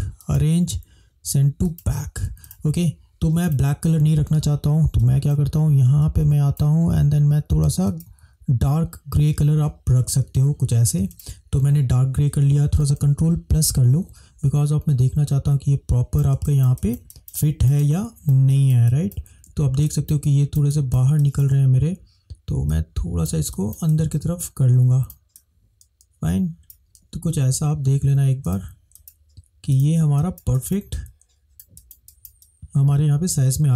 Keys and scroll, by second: 13.1 ctrl+=, 13.8 ctrl+=, 13.9 ctrl+=, 16.5 space, 30.3 space.